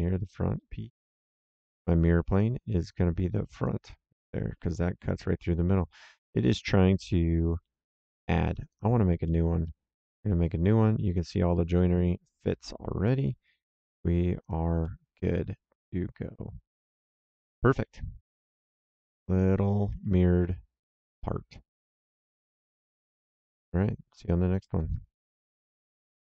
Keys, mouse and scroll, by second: 0.5 middle click, 2.2 click, 3.6 click, 4.0 right click, 8.6 click, 9.2 middle click, 9.6 right click, 11.3 right click, 13.0 middle click, 14.3 click, 14.8 middle click, 15.2 right click, 16.7 middle click, 22.9 click, 24.1 click, 25.7 ctrl+shift+l.